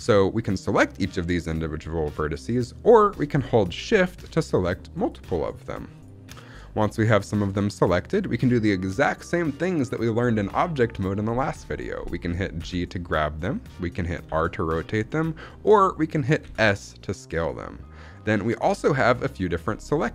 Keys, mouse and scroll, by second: 0.8 click, 1.4 click, 2.0 click, 2.4 click, 4.3-5.5 shift+drag, 5.8 shift+click, 6.7-7.3 scroll down 3, 7.1 middle click, 7.5-9.0 shift+middle drag, 12.5 g, 13.4 right click, 14.1 r, 14.9 right click, 16.3 s, 18.4 right click, 19.2 middle click, 19.9-20.1 scroll up 2.